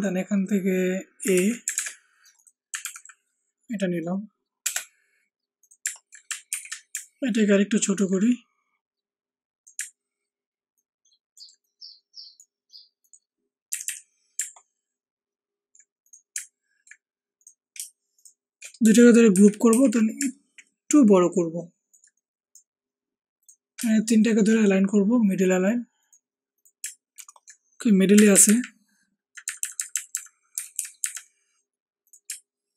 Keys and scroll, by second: 1.3 ctrl+c, 1.7 ctrl+alt+Tab, 2.8 ctrl+v, 4.6 BackSpace, 6.4 ctrl+alt+t, 13.6 Left, 13.8 Left, 19.3 ctrl+shift+g, 19.6 ctrl+shift+t, 28.1 Up, 28.3 Up, 28.4 Up, 28.5 Up, 29.4 Up, 29.5 Up, 29.7 Up, 29.9 Up, 30.1 Up, 30.7 Down.